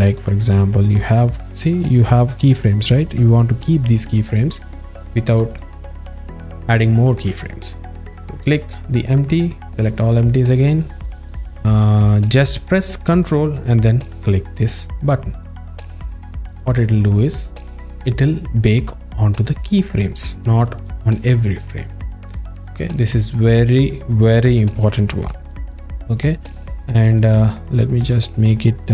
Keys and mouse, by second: 0.1 ctrl+alt+middle click, 1.3 alt+shift+middle click, 1.5 alt+shift+middle click, 2.6-5.6 drag, 10.8 click, 11.2-12.4 drag, 16.1 ctrl+click, 19.4-23.3 drag, 25.5 z, 28.0 a.